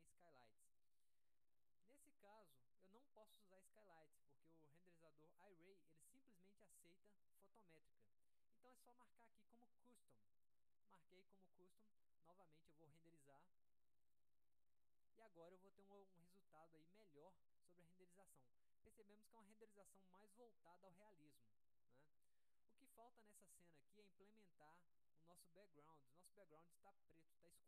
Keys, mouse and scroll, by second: 10.5 click, 11.9 middle click, 12.1-12.7 scroll up 1, 12.7 middle click.